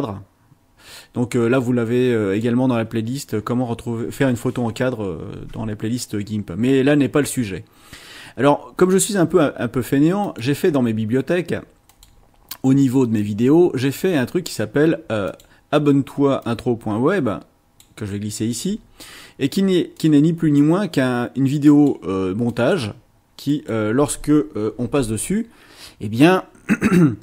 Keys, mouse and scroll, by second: 10.2 click, 11.9 click, 13.4 scroll down 2, 14.0 scroll up 2, 15.3 click, 16.4-18.0 drag, 20.0 click, 20.6-22.1 drag, 22.5 click, 23.4 click, 24.8 space.